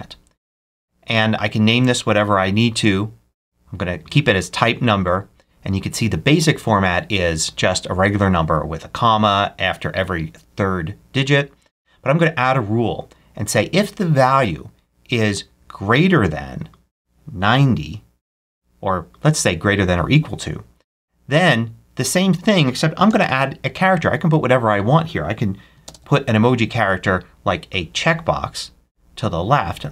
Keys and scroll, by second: 17.9-18.7 typing, 22.9 Left, 25.7 ctrl+super+space, 29.8 space.